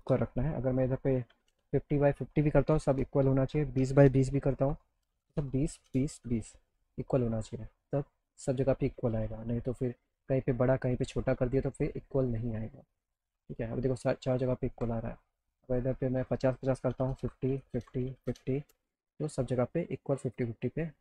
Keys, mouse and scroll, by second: 1.4 KP_3, 1.6 KP_0, 2.8 BackSpace, 4.0 KP_0, 4.8 Tab, 5.4 Tab, 6.2 KP_Enter, 7.2 alt+middle click, 11.7 alt+middle click, 13.5 alt+middle click, 15.8 click, 18.3 KP_0, 18.7 KP_Enter, 19.6-21.0 alt+drag.